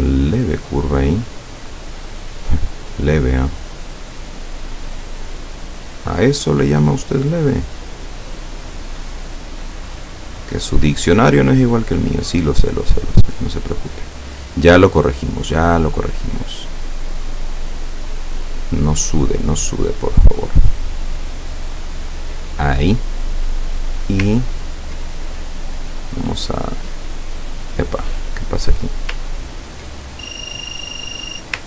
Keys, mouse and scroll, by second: 7.6 click, 8.7 click, 13.1 click, 17.3 click, 18.7 click, 20.0 click, 20.7 click, 21.9 click, 23.8 click, 24.4-24.9 ctrl+scroll up 2, 25.7 click, 26.8 click, 27.7 click, 28.2 click, 28.7 click, 29.3-29.9 ctrl+scroll down 2.